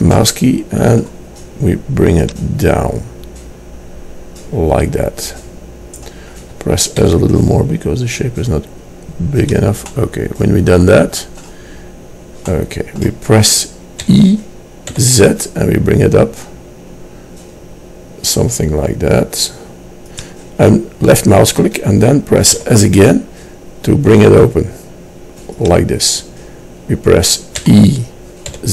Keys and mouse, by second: 0.2-4.2 middle drag, 4.2-6.2 drag, 7.1 s, 9.9 click, 14.2 e, 22.7 s, 27.8 e.